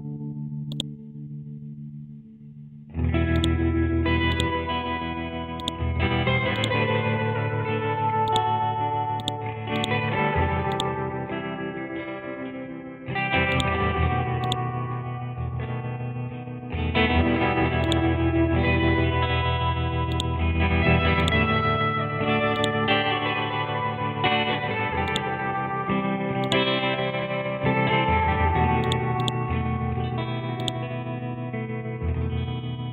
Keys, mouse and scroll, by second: 1.6 scroll down 1, 3.3-5.0 drag, 5.0-5.6 scroll up 1, 5.6 click, 5.6 click, 6.5 right click, 8.3-16.7 drag, 16.7-17.4 scroll up 1, 17.9-19.5 drag, 19.5-20.1 scroll down 1, 20.1-23.3 drag, 23.3 scroll up 1, 23.4 Down, 25.1 click, 25.4-26.5 scroll up 1, 26.5-28.1 drag, 28.1 scroll down 1, 28.8 click, 30.1-30.6 scroll down 1, 30.6 click, 31.4-31.8 scroll up 1, 31.8 Up.